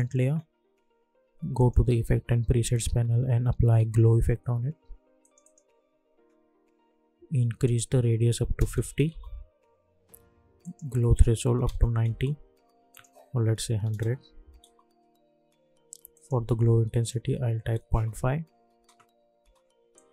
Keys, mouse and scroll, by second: 1.8 ctrl+a, 2.8-4.2 typing, 5.2 click, 7.6 click, 9.0 Return, 10.6 click, 12.0 Return, 12.9 click, 14.6 Return, 16.1 click, 17.8 Return, 18.7 space, 19.9 click.